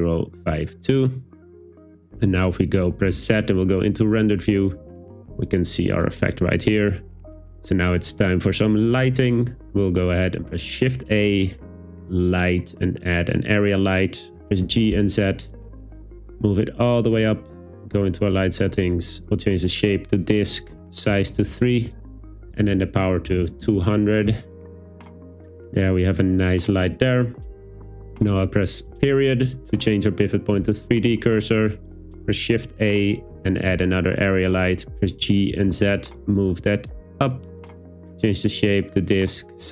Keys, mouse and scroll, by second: 3.1 z, 10.5 shift+a, 14.7 g, 14.9 z, 16.9 click, 19.3-20.4 drag, 20.8-23.7 drag, 23.5 0, 32.2 shift+a, 35.0 g, 35.5 z, 37.2 click, 38.2-39.2 drag, 39.6-39.7 drag.